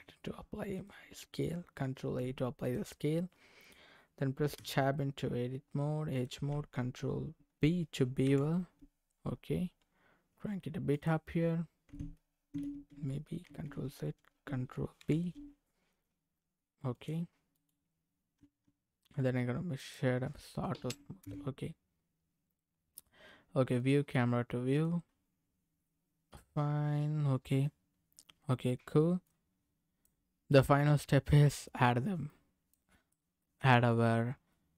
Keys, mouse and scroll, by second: 1.9 ctrl+a, 4.5 Tab, 8.2 ctrl+b, 9.9-10.8 scroll up 5, 10.9 click, 13.4 ctrl+z, 15.0 ctrl+b, 16.9 click, 17.5 right click, 18.4 Tab, 19.0 right click, 20.3 middle click, 21.2 KP_0, 22.2-22.5 scroll down 2, 23.7 click, 24.7 click, 25.1-25.8 scroll down 3, 25.8-27.7 middle drag, 27.9-28.5 scroll down 1, 28.5-28.8 scroll down 1, 29.2 click, 30.5-32.2 middle drag, 32.2 click, 32.3 middle click, 33.1 click, 33.2-34.7 middle drag.